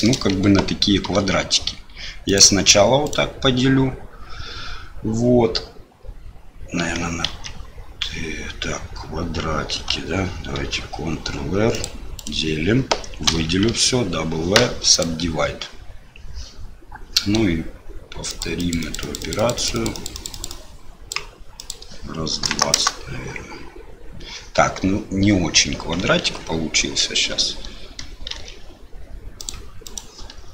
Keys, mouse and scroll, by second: 1.0 ctrl+r, 7.3 ctrl+z, 10.5 ctrl+r, 13.3 a, 13.7 w, 18.3 click, 18.7 click, 19.4 click, 19.9 click, 20.5 click, 21.6-24.3 drag, 26.2 ctrl+z, 28.3 ctrl+r.